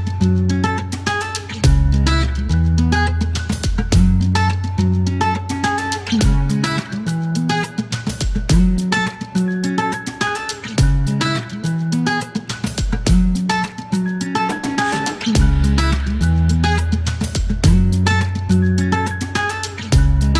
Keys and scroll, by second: 1.3 alt+q, 4.5 alt+q, 7.1 typing, 10.5 c, 10.8 space, 12.9 k, 13.4 space, 16.4 Delete, 17.7 KP_Decimal, 18.9 space.